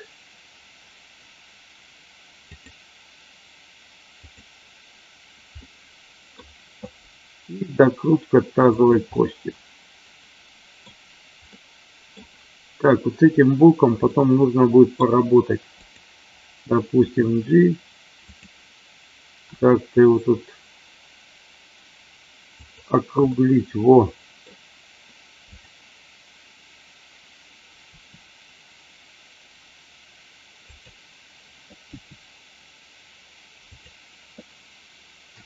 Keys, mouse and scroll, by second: 2.4 click, 4.2 click, 5.6 middle click, 7.6 r, 8.7 click, 9.2-10.8 middle drag, 11.5 middle click, 14.0 middle click, 15.8 click, 16.9 g, 18.2 click, 19.4 r, 22.5 click, 23.3-24.4 middle drag, 27.9 r, 30.7 click, 31.9 g, 33.7 click, 35.3 a.